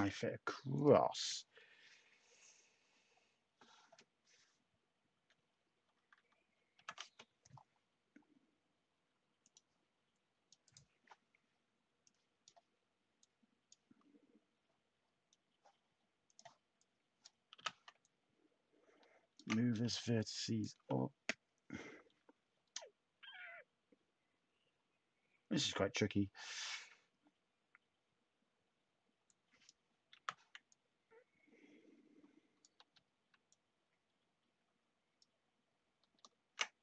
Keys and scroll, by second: 1.1 /, 4.3 /, 6.7 ctrl+k, 17.5 t, 30.1 t, 32.7 ctrl+z, 36.0 ctrl+z.